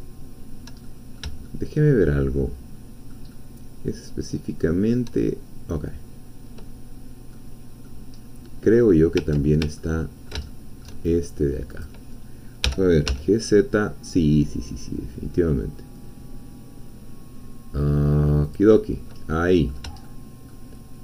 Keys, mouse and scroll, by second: 0.8 shift+middle click, 1.4-2.4 shift+middle drag, 2.4 shift+click, 3.5-5.0 shift+drag, 6.9-7.3 scroll down 1, 7.3 click, 8.2-8.6 scroll up 1, 9.8-11.0 ctrl+middle drag, 11.8 click, 12.6 g, 13.1 z, 18.4 click, 18.8 middle click, 19.3 middle click, 20.0 shift+middle click.